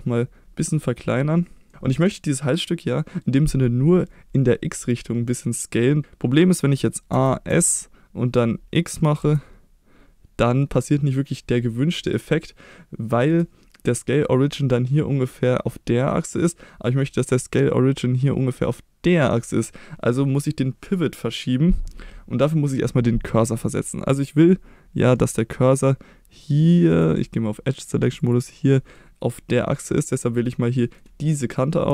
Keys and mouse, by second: 1.7-6.0 middle drag, 6.0 a, 7.1 a, 7.5 s, 9.2 x, 13.3 right click, 26.9 click, 28.1 click, 28.7 middle click, 29.9 middle click, 30.8 middle click.